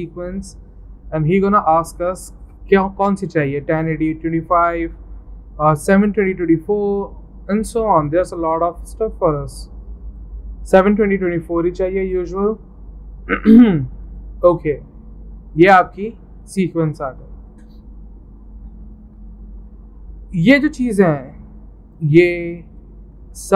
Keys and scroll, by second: 18.9 alt+Tab.